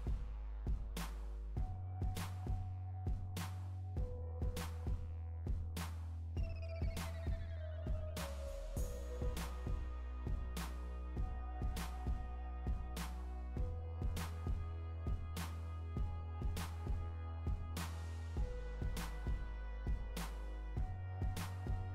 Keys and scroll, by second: 1.3 Right, 6.0 Right, 6.8 Down, 7.5 Up, 20.6 Right.